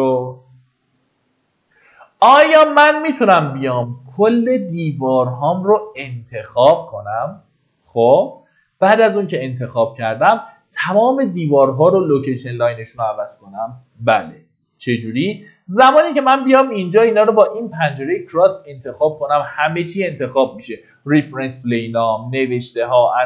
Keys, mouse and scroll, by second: 2.0-2.4 scroll down 1, 5.2-23.2 drag.